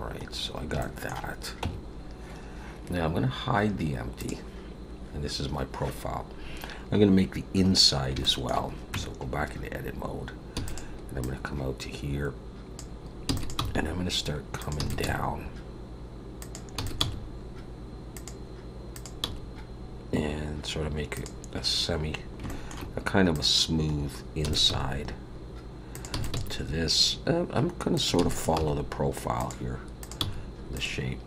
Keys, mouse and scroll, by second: 0.8 shift+middle click, 1.6 Tab, 1.8-3.4 scroll down 3, 4.2 click, 7.7-8.1 scroll up 3, 8.2 shift+middle click, 8.9 Tab, 9.5-10.5 scroll up 3, 10.5 e, 11.2 click, 13.2 e, 13.5 g, 14.8 e, 15.0 g, 16.8 e, 17.0 g, 18.9 click, 19.2 g, 21.6-22.3 scroll down 4, 22.4 shift+middle click, 23.3 click, 23.9-24.4 scroll up 2, 24.4 e, 24.7 g, 26.1 e, 26.3 g, 28.1 e, 28.6 g, 30.0 click, 30.2 g.